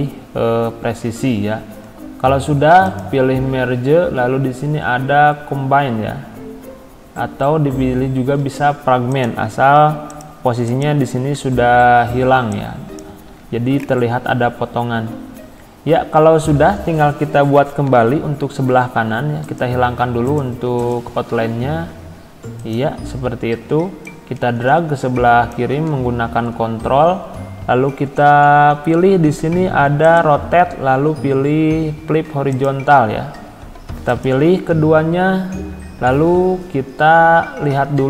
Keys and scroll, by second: 13.3 ctrl+z.